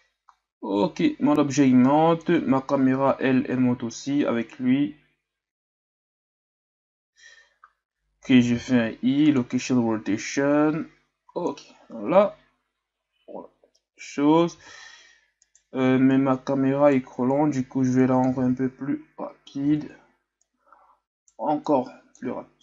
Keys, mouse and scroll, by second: 0.0-2.7 drag, 2.7 shift+scroll up 2, 3.4-4.0 shift+scroll up 7, 4.2 shift+scroll up 2, 7.2 shift+scroll up 2, 10.4-12.2 drag, 12.2 alt+a, 14.7 alt+a, 15.4 right click, 16.1-17.4 right drag, 17.4-18.4 drag, 18.4 alt+a, 19.7 alt+a, 20.4-21.7 right drag, 21.7-22.2 drag, 22.2 alt+a.